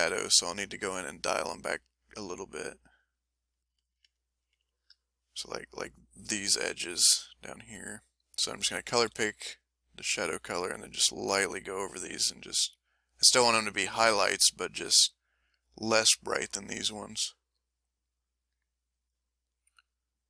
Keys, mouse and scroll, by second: 0.7 click, 1.4-3.2 drag, 4.7 click, 8.4 s, 9.0 f, 9.4 click, 10.5-15.6 drag, 17.6-19.1 drag, 19.6-20.2 drag.